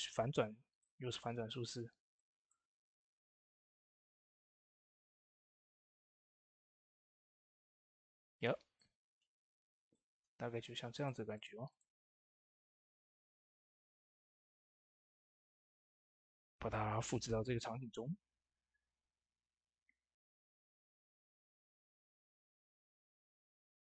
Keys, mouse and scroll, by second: 0.4 scroll down 1, 0.6-2.0 middle drag, 1.0 typing, 2.0 click, 6.6-8.3 middle drag, 8.3 Tab, 8.6-10.8 middle drag, 10.8 click, 12.9 ctrl+c, 14.2 click, 15.8 ctrl+v, 17.6 typing, 22.4 ctrl+v, 22.4 typing, 22.5 click, 23.0 middle click, 23.3 scroll down 1, 23.8 middle click.